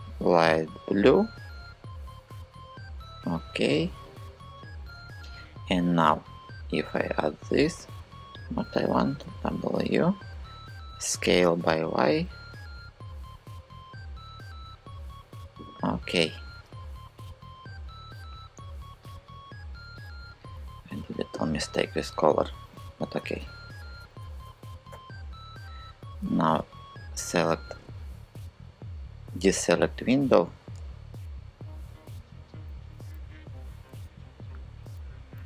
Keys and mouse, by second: 2.2 click, 5.5 click, 6.7 click, 8.5 w, 10.5 s, 11.3 y, 14.3 click, 22.8 ctrl+KP_Add, 23.1 ctrl+KP_Add, 23.4 ctrl+KP_Add, 23.9 ctrl+KP_Add, 24.1 ctrl+KP_Add, 24.5 ctrl+KP_Add, 32.9 super+z, 33.9 super+z, 34.7 super+z.